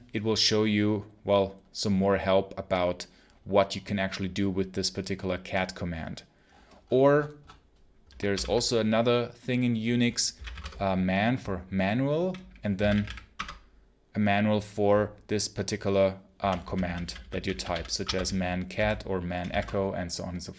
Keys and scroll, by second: 8.2 ctrl+l, 10.0-10.9 typing, 12.4-13.4 typing, 16.3-19.3 typing, 17.9 Escape.